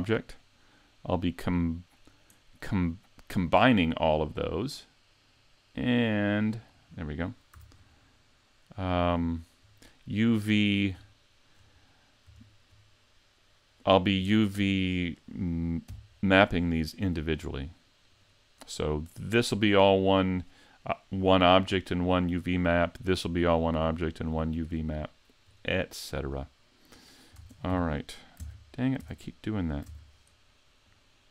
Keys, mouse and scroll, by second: 0.2-0.8 scroll down 3, 0.9 middle click, 3.4 click, 6.9 scroll down 5, 7.6 a, 7.8-8.9 scroll down 2, 8.2 middle click, 8.9-9.3 scroll down 2, 9.3 shift+middle click, 11.3 middle click, 11.9 middle click, 12.4 shift+middle click, 14.4 shift+middle click, 15.9 n, 17.1-17.7 scroll down 2, 18.1 right click, 18.8 right click, 22.6 middle click, 24.1 shift+middle click, 24.6-25.1 scroll up 4, 25.0 shift+middle click, 27.4 ctrl+Tab, 27.7 3, 28.4 Tab, 29.0 Tab, 29.9 ctrl+Tab, 30.9 click.